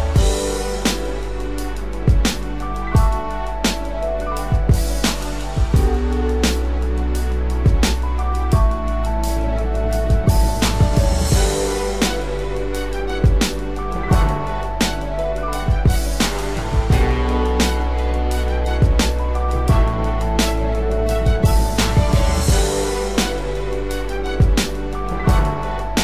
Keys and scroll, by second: 1.4 ctrl+=.